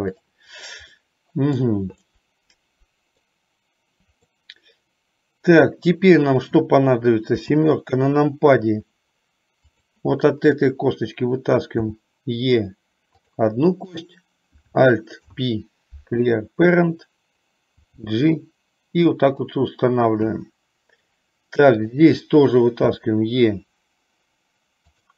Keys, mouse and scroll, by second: 0.3 click, 1.3 middle click, 2.3-3.5 middle drag, 4.4-6.4 middle drag, 7.4 KP_7, 9.7 click, 11.9 e, 14.0 click, 15.3 alt+p, 17.9 g, 21.9 click, 23.2 e.